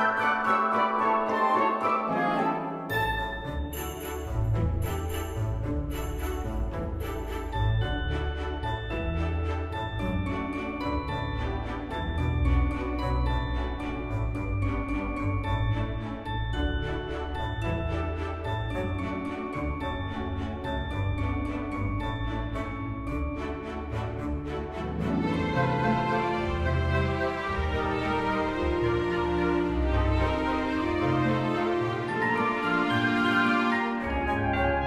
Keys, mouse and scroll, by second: 0.7 space, 2.2 space, 3.3 space, 4.6-7.5 typing, 8.6-11.0 typing, 9.7 ctrl+z, 10.8 ctrl+z, 12.1 space, 12.4 space, 12.6 space, 14.4-16.1 typing, 17.5 space, 17.9 space, 18.1 space, 19.6 right click, 20.6-22.7 typing, 24.3 space, 26.3 space, 27.6 space, 28.2 space, 29.4 space, 30.3 space, 30.5 space, 30.8 space, 31.8 space, 32.4 space, 32.7 space.